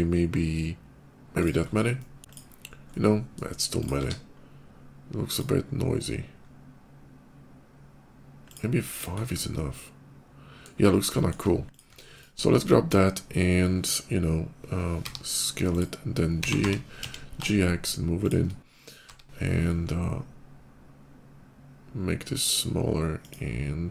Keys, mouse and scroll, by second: 1.2 click, 1.4 scroll down 1, 1.8 middle click, 2.2 KP_5, 2.5 middle click, 3.5 click, 3.8 q, 5.1 click, 5.7 middle click, 6.1 middle click, 8.3 click, 8.7 click, 8.9 scroll up 1, 9.1-10.5 middle drag, 10.6 scroll up 1, 11.0 shift+middle click, 11.5 click, 11.7 Tab, 11.9 click, 12.3 middle click, 15.1 i, 15.6 click, 16.1 g, 16.4 y, 16.8 x, 18.1 click, 18.9 i, 23.0 click.